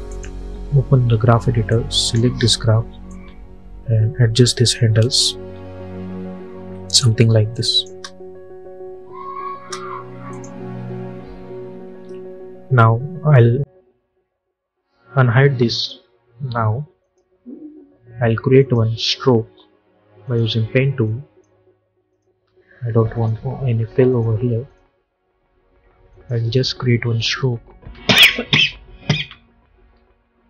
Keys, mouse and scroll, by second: 5.1-7.4 drag, 7.8 space, 10.2 click, 11.5 j, 15.8 click, 27.0 shift+click.